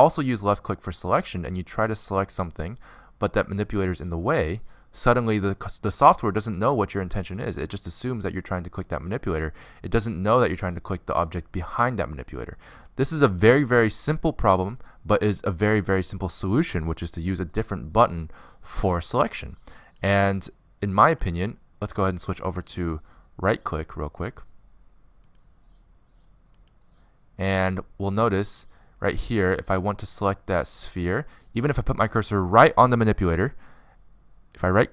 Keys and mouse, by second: 3.1-4.7 drag, 4.9 click, 7.1 click, 8.7 middle click, 12.7 middle click, 13.0 click, 14.8 middle click, 16.0 click, 20.4 click, 20.6 right click, 24.2-26.0 drag, 29.0 click, 29.7-31.0 middle drag, 30.7 click, 30.7 right click, 32.8 middle click.